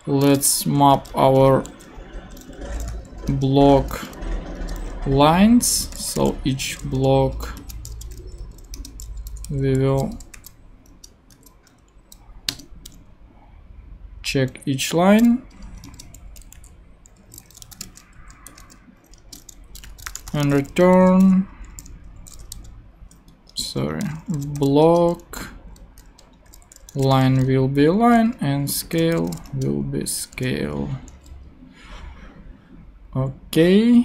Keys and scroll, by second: 0.4 b, 0.9 Return, 1.6 super+Return, 1.8 super+z, 2.2 super+BackSpace, 2.5-4.4 typing, 4.5 Return, 5.6-11.3 typing, 8.7 Return, 10.9 Return, 12.5 Return, 15.8 Return, 16.5 super+Return, 16.5 super+z, 17.3-21.2 typing, 22.5 shift+g, 23.3 shift+Escape, 23.9 shift+Escape, 24.0 shift+b, 24.6 shift+l, 24.8 Return, 26.5-30.4 typing, 30.0 Right.